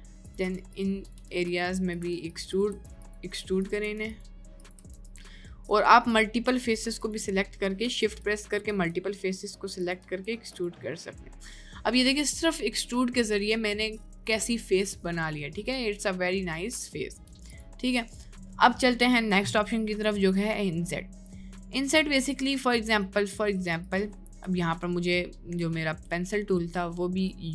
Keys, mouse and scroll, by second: 0.4 e, 1.2 e, 1.9 click, 2.3 click, 2.5 click, 2.7 e, 3.9 e, 4.9 e, 5.5 middle click, 8.3 middle click, 8.7 e, 10.0 Tab, 10.6 drag, 11.0-13.5 middle drag, 13.8-14.1 middle drag, 14.6 middle click, 15.7-17.3 middle drag, 18.4 Tab, 21.3 middle click, 23.8 click, 24.8 shift+middle click, 27.0 shift+middle click.